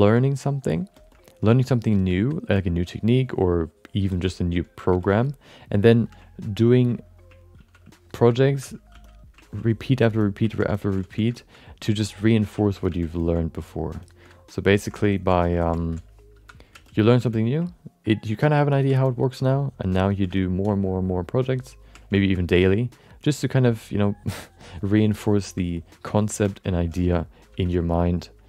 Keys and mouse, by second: 0.1 click, 1.1 alt+middle click, 1.6-4.0 drag, 1.6 f, 4.1 alt+shift+middle click, 4.2 alt+middle click, 4.5 click, 5.0 alt+shift+middle click, 5.2 alt+middle click, 7.6 ctrl+i, 8.5 5, 8.9 f, 9.4 ctrl+middle click, 9.7 alt+middle click, 10.0 shift+middle click, 10.2 middle click, 10.5 ctrl+middle click, 10.7 alt+shift+middle click, 11.0 f, 11.3 alt+shift+middle click, 11.6 middle click, 11.9 ctrl+alt+middle click, 12.2 middle click, 12.6 ctrl+middle click, 12.8 f, 13.1 alt+shift+middle click, 13.3 alt+middle click, 14.0 alt+shift+middle click, 14.2 alt+middle click, 14.7 ctrl+alt+middle click, 15.1 alt+shift+middle click, 15.3 alt+middle click, 15.6 middle click, 16.4 4, 16.7 f, 17.1 f, 17.7-18.9 ctrl+drag, 19.0 alt+middle click, 19.4-20.5 ctrl+drag, 20.3 alt+middle click, 20.7-21.8 ctrl+drag, 22.1 shift+middle click, 22.3 middle click, 22.6-25.4 ctrl+drag, 25.7 alt+middle click, 26.1 ctrl+middle click, 26.4 shift+middle click, 26.6 middle click, 27.5 ctrl+i.